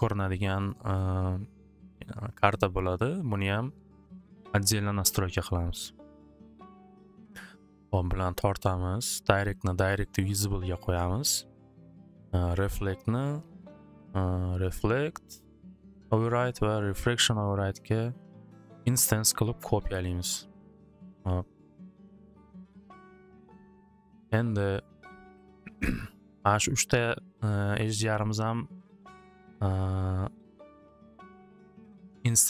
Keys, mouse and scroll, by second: 2.3 click, 2.6 click, 9.3 click, 10.4 click, 14.0 click, 14.7 click, 17.1 click, 18.0 click, 20.7 click, 22.0 click, 24.1 click, 24.7 click, 26.2 click, 30.8 click, 31.8 click, 32.1 click.